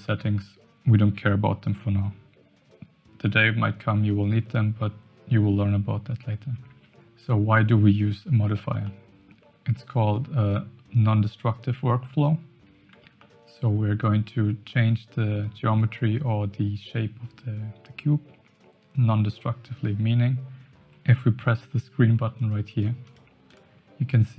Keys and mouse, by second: 8.8-9.3 shift+middle drag, 13.2-13.5 shift+middle drag, 22.7 click, 23.0 click, 23.4 click.